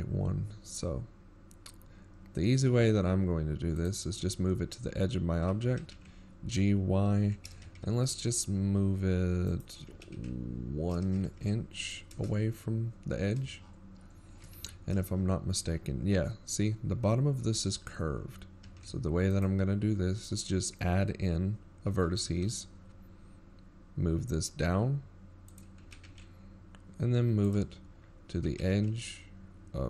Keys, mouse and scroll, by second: 0.6 g, 15.4-16.3 scroll down 5, 16.8 shift+scroll down 24, 17.0 z, 17.5-18.1 shift+scroll down 3, 19.4-19.8 shift+scroll down 2, 20.2-20.8 scroll up 1, 21.0 ctrl+r.